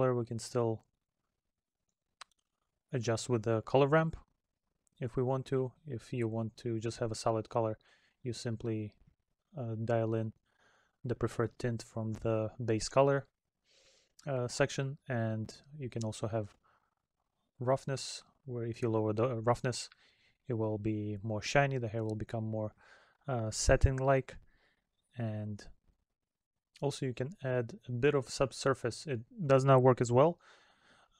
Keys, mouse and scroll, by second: 13.6 middle click.